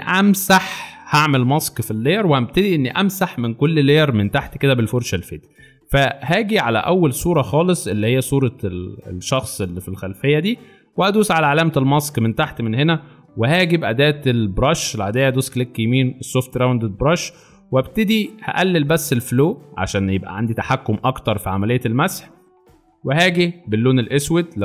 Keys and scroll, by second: 13.9 b.